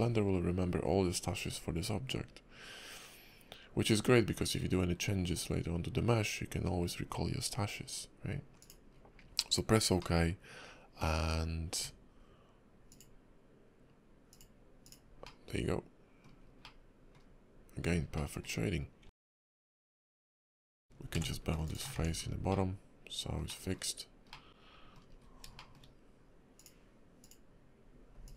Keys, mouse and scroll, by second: 8.9-9.3 scroll down 5, 10.0 middle click, 11.8 Tab, 12.9 click, 15.2 middle click, 16.4 scroll down 2, 16.6 middle click, 18.1 middle click, 19.0 Tab, 19.4 shift+middle click, 19.6 shift+middle click, 19.8 click, 20.9 ctrl+b, 21.9 Tab, 22.2 scroll down 4, 22.5 middle click, 23.5 middle click, 24.3 middle click, 25.1 scroll up 2, 25.6 shift+middle click, 25.8 shift+middle click, 26.5 click.